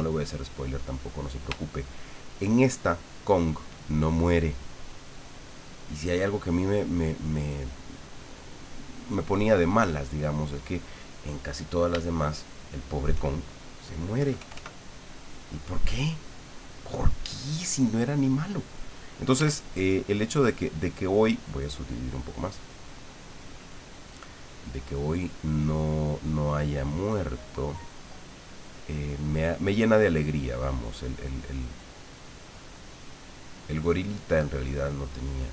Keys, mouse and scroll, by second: 0.9 click, 1.6 shift+click, 2.4 shift+click, 3.2 shift+click, 12.0-13.2 shift+drag, 14.1 KP_Add, 19.3 f, 20.2 click, 22.2 click, 24.2 click, 24.9 click, 25.2 click, 26.7 click, 27.6 click, 28.0 click, 28.5 click, 28.9-35.5 drag.